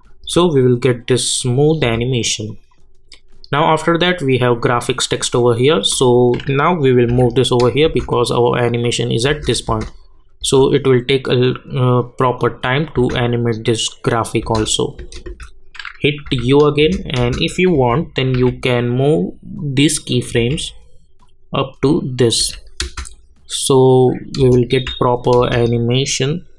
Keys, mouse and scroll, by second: 0.2 space, 2.5 click, 7.1 [, 7.8 space, 12.4 click, 12.9 space, 16.2 u, 16.8 space, 17.7 j, 18.5 j, 19.5 click, 20.3 k, 21.2 click, 22.4 j, 22.8 space, 24.8 j, 25.4 space.